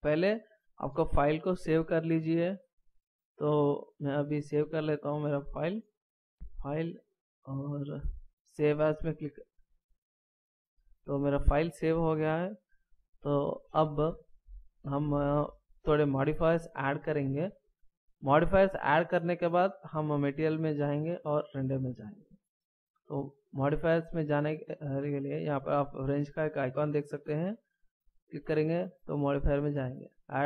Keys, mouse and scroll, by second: 6.3 click, 11.0 click, 17.3 scroll up 2, 18.0 scroll down 1, 27.9 click.